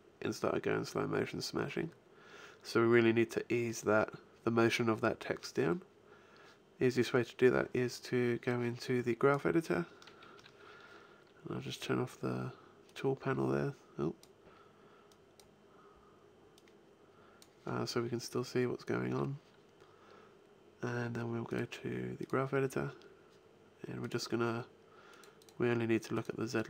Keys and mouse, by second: 6.8-8.2 drag, 8.5 click, 8.9-12.8 drag, 10.2 t, 15.1 click, 19.8-21.1 drag.